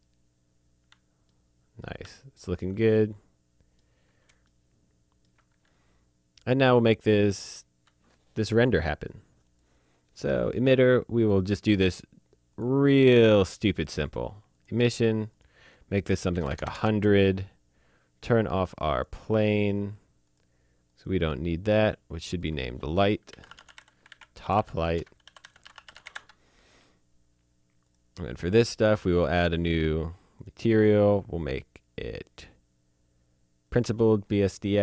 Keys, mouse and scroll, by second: 0.8 alt+Num_Lock, 1.3 alt+middle click, 2.1 alt+middle click, 2.9 middle click, 3.9 scroll up 1, 4.5 shift+middle click, 9.4 click, 11.2 click, 16.3 KP_1, 16.4 KP_0, 16.7 KP_Enter, 17.9 scroll down 1, 18.9 click, 23.3-26.0 typing, 26.1 Return, 27.8 click, 29.6 click, 33.7 click.